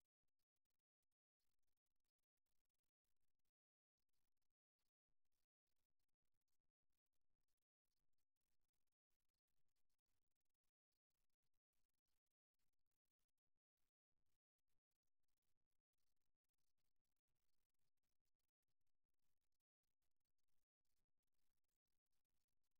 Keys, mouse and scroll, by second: 0.2-3.1 drag, 5.5-7.5 middle drag, 8.0 middle click, 8.7-9.7 drag, 9.7 middle click, 10.5 click, 11.6 click, 12.4 middle click, 13.0-14.1 drag, 13.0 right click, 14.1-16.2 middle drag, 16.4-18.2 right drag, 18.6-20.4 drag, 18.6 middle click, 18.6 right click, 20.4-22.2 middle drag.